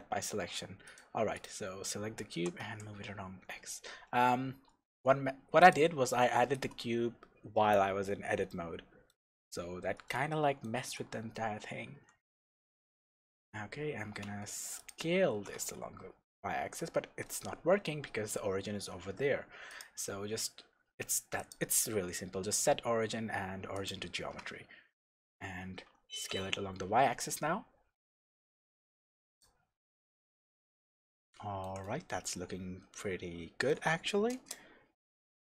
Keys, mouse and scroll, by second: 0.0 middle click, 0.0-0.3 scroll up 2, 0.3 Tab, 0.8 click, 1.3 click, 2.3 g, 5.7 click, 6.1-14.8 shift+middle drag, 7.4-8.1 scroll down 2, 8.1-8.5 scroll up 2, 9.5-10.1 scroll down 2, 11.9 s, 14.3 Escape, 14.8 click, 15.3 s, 16.7 Escape, 17.2-17.5 scroll down 1, 17.5-19.7 scroll up 1, 19.7-29.4 drag, 24.3 scroll up 2, 24.6-26.1 scroll down 2, 26.1 s, 29.8-35.4 middle drag, 30.5 scroll down 2, 34.3 KP_0, 35.0-35.4 scroll up 1.